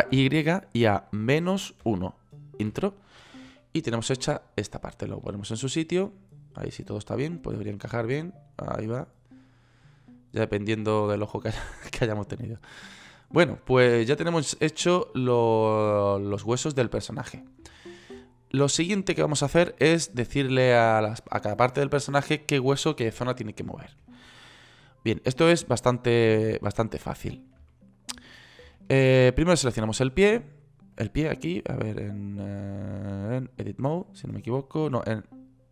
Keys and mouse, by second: 17.5-18.9 middle drag, 25.3 click, 32.8 click, 33.7 click.